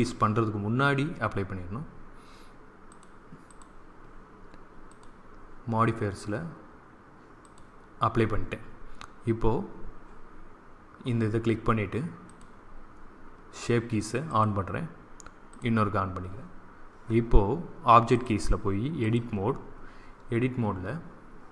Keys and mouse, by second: 7.3-9.1 drag, 12.2-13.9 drag, 14.2-17.2 drag, 18.0-20.0 drag.